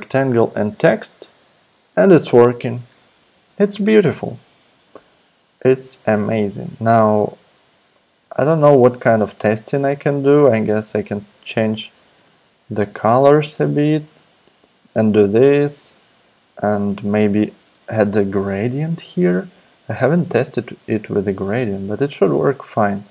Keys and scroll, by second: 0.7 alt+super+p, 3.3 super+z, 10.8 shift+Up, 11.0 shift+Up, 11.1 shift+Up.